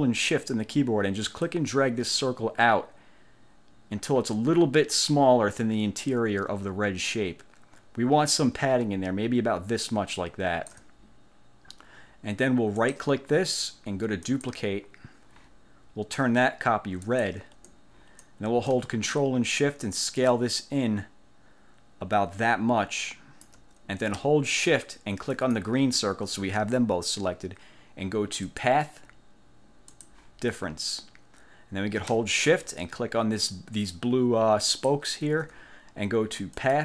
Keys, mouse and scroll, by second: 1.6-11.0 ctrl+shift+drag, 12.9 click, 14.4 click, 17.1 click, 20.4-23.8 ctrl+shift+drag, 25.5 shift+click, 28.6 click, 30.0 click, 34.8 shift+click, 36.7 click.